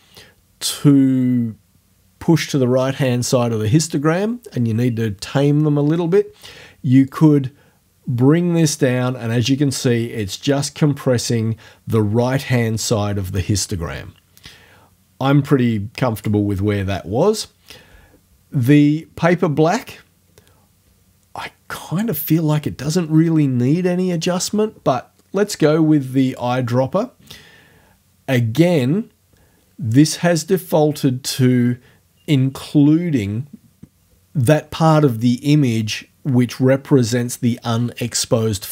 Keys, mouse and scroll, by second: 7.1-16.5 drag, 16.5-21.5 middle drag, 26.3 click.